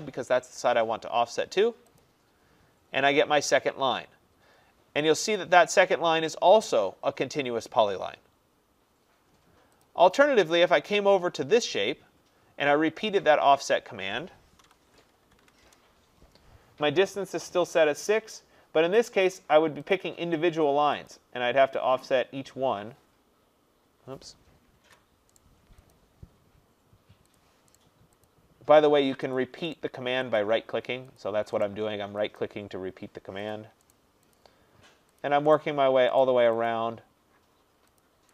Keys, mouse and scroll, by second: 2.0 click, 5.4 click, 9.9 click, 14.6-15.5 typing, 15.6 Return, 19.2 click, 20.0 click, 21.2 click, 24.9 ctrl+z, 25.4 right click, 26.0 click, 27.4 click, 27.8 right click, 28.3 click, 29.4 click, 29.8 right click, 30.4 click, 31.2 click, 31.7 right click, 32.4 click, 33.5 click, 34.0 right click, 34.4 click, 35.2 click, 35.5 right click, 36.2 right click, 36.7 click, 38.0 click.